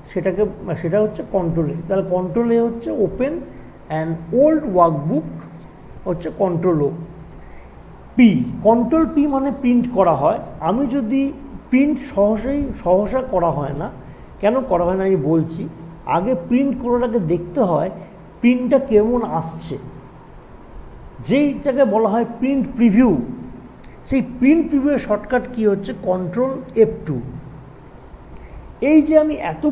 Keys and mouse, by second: 0.7 click, 7.5 click, 26.8 ctrl+F2, 27.4 typing.